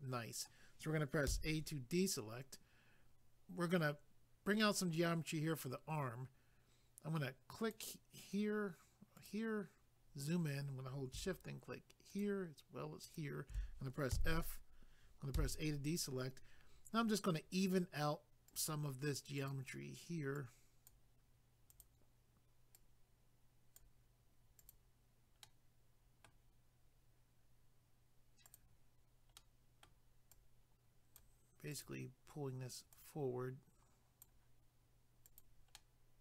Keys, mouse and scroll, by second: 1.3 a, 7.6 click, 9.1 click, 9.3 click, 10.0 scroll up 1, 12.1 shift+click, 12.2 shift+click, 13.0 shift+click, 13.2 shift+click, 14.1 f, 15.8-16.3 scroll down 1, 16.3-17.0 scroll down 1, 18.5 click, 18.6 click, 19.4 click, 19.5 click, 20.3 click, 21.7 click, 21.8 click, 22.7 click, 24.6 click, 24.7 click, 25.4 middle click, 28.5 click, 28.6 click, 29.4 middle click, 30.3 click, 31.7 click, 31.8 click, 32.9 click, 35.3 click, 35.4 click, 35.7 middle click.